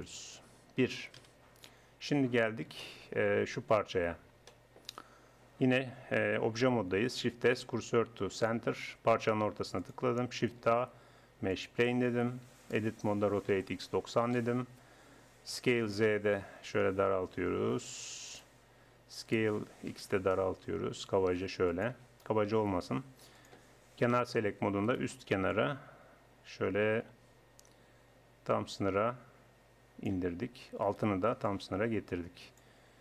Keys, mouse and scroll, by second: 0.1-2.3 drag, 0.5 Tab, 1.2 KP_1, 2.3 Tab, 6.5 middle click, 7.1 shift+s, 10.5 shift+a, 12.5 Tab, 13.2 r, 15.6 s, 19.3 s, 23.3 click, 24.3 click, 24.9 middle click, 25.3 right click, 25.5-26.6 middle drag, 26.6 click, 30.9 right click, 31.5-33.0 middle drag.